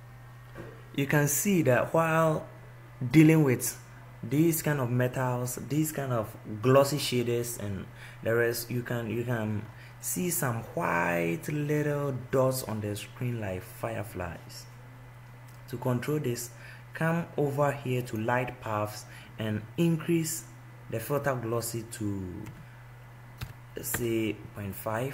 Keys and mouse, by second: 20.7-25.1 drag.